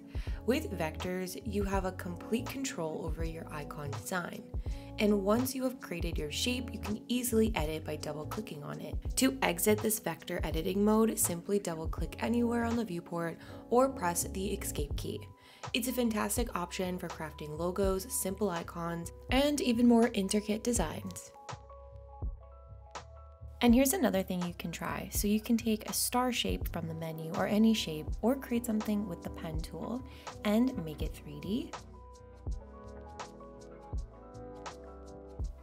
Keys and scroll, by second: 12.9 Escape.